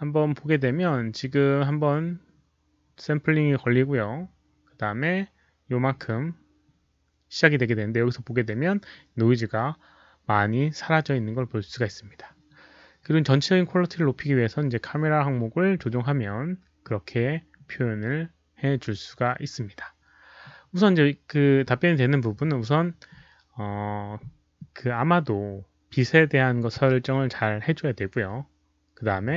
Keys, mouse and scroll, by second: 0.4 scroll up 1, 1.3 scroll down 1, 5.8-6.1 scroll up 1, 6.6-7.0 scroll up 1, 11.2-11.5 scroll down 1, 11.7-12.6 scroll down 2, 13.0-13.3 scroll down 1, 21.1 scroll up 1.